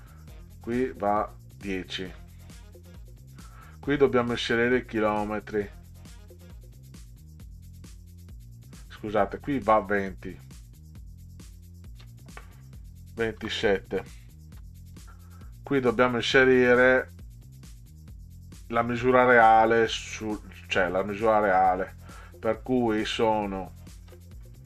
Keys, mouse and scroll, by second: 2.2 click, 3.4 click, 9.1 click, 11.5 click, 13.4 2, 14.5 7, 15.3 click, 23.4 click.